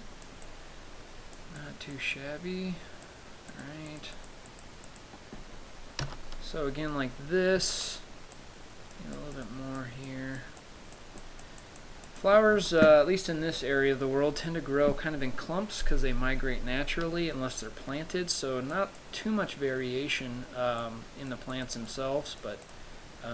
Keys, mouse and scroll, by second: 0.7 click, 1.8 click, 2.4 click, 3.7 click, 4.4 click, 4.7 click, 5.1 click, 6.3 KP_0, 7.2 scroll up 1, 7.8-8.2 scroll up 1, 7.8 KP_0, 8.6 click, 9.4 click, 9.7 click, 10.3 click, 10.8 click, 11.4 click, 11.9 click, 12.4 click, 12.8 KP_0, 13.8 scroll down 2, 14.6-15.7 scroll up 1, 18.9 click, 21.0 click, 21.7 click, 22.1 click, 22.5 click, 22.9 click.